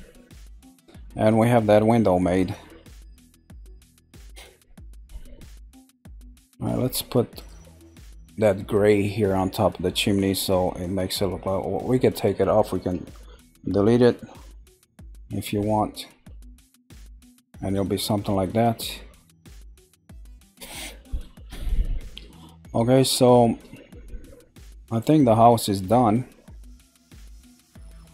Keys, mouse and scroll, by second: 0.4-4.5 middle drag, 4.5-5.4 scroll down 1, 5.4-7.3 middle drag, 7.3 click, 17.1-18.6 middle drag, 18.6-19.3 scroll up 2, 19.3 shift+middle click, 20.1 scroll down 2, 20.6-22.5 middle drag, 22.5-23.0 scroll down 1, 23.0-25.4 middle drag, 25.4-26.2 scroll up 1, 26.2-28.1 shift+middle drag.